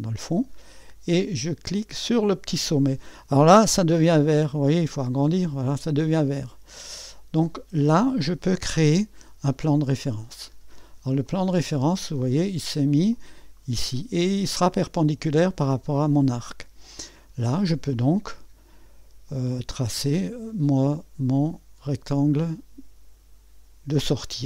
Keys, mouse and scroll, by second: 1.7 click, 4.1 ⌨, 6.8 scroll down 1, 9.4 click, 11.3-12.3 drag, 13.1-15.1 drag, 19.3 click, 20.1 click, 21.3 click.